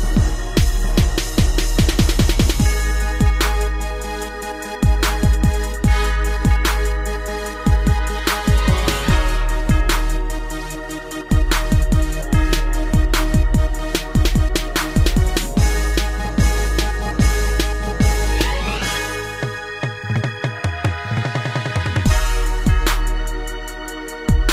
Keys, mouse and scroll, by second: 0.4 middle click, 1.3 a, 2.3 b, 2.7 click, 4.0 click, 5.0 middle click, 6.3 click, 8.4 click, 13.2 Right, 13.4 Right, 13.8 Right, 15.0 Up, 16.3 middle click, 17.5 click, 19.6 click, 22.6 click, 22.8 click, 23.3 middle click.